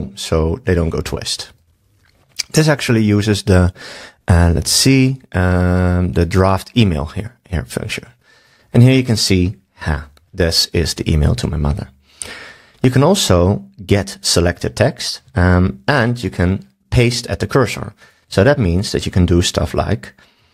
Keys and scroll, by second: 18.4 super+a, 20.4 super+s.